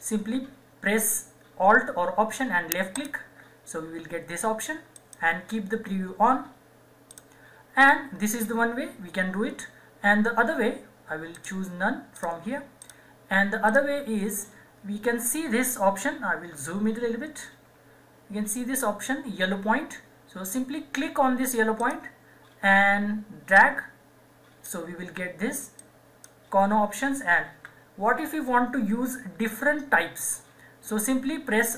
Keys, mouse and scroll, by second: 3.0 alt+click, 11.4 click, 17.1 =, 21.8-25.8 drag, 24.9-25.8 drag, 27.5 ctrl+z, 29.3 ctrl+z.